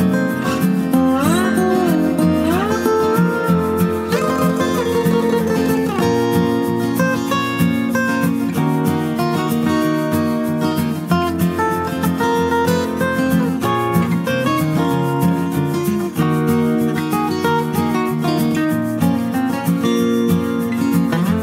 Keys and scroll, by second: 9.7 ctrl+t, 19.8 ctrl+t.